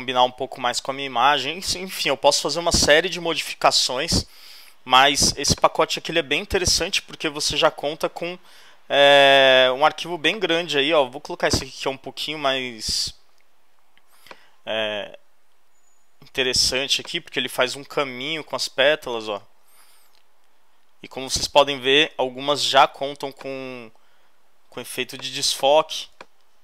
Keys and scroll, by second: 6.3 shift+super+., 19.3 Return.